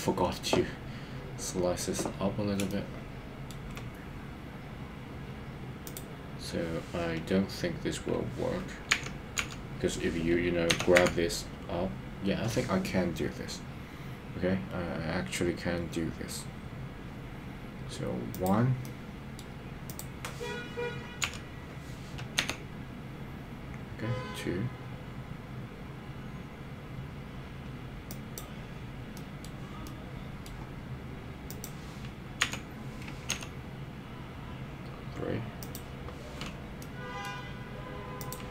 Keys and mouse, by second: 2.7 shift+middle click, 9.0 KP_1, 9.4 KP_3, 10.7 g, 11.1 z, 18.8 middle click, 21.2 KP_3, 22.5 g, 28.1 click, 29.1 middle click, 29.8 middle click, 32.4 KP_3, 33.4 g, 35.6 click, 36.8 middle click, 38.2 click.